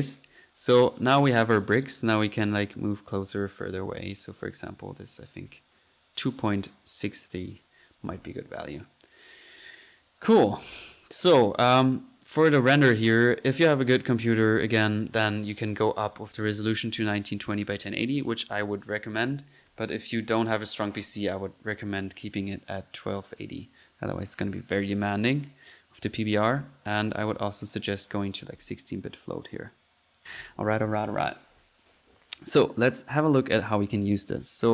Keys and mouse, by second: 0.3 click, 0.5 click, 1.8 click, 2.7 click, 4.7 click, 8.6 click, 10.5 click, 11.0 middle click, 11.1 drag, 11.9-12.4 drag, 12.4 click, 13.5-14.1 drag, 14.2 click, 14.4 click, 15.2 drag, 16.2 click, 16.4 click, 17.0 click, 17.4 click, 22.1-22.5 drag, 23.7 click, 27.0 click, 28.6 click, 28.9 click, 30.2 click, 31.7 middle click, 34.3 right click.